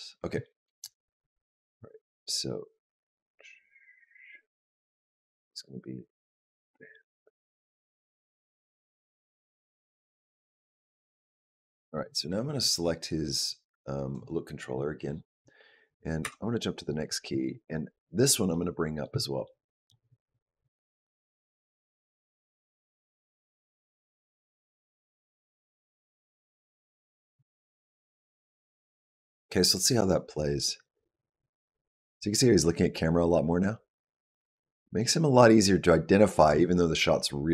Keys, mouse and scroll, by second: 1.9 click, 13.0 click, 14.5 click, 16.1 Up, 17.7-18.3 scroll down 4, 18.3 middle click, 19.0 shift+middle click, 19.5 middle click, 19.5 scroll down 1, 20.3 g, 24.0 shift+middle click, 24.3 middle click, 25.4 g, 27.4 shift+middle click, 28.0 middle click, 28.4 scroll down 1, 28.6-29.8 scroll up 2, 29.8 click.